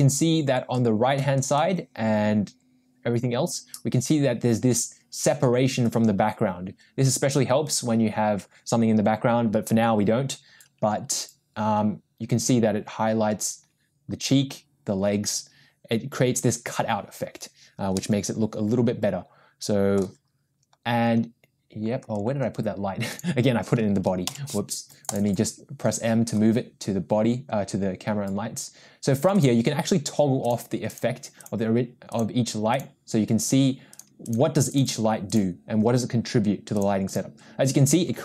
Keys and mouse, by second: 18.1-20.1 middle drag, 23.1 click, 24.3 m, 29.3 click, 30.5 click, 31.4 click, 32.1 click, 33.9 click, 34.2 click, 34.7 click, 36.8 click, 37.1 click.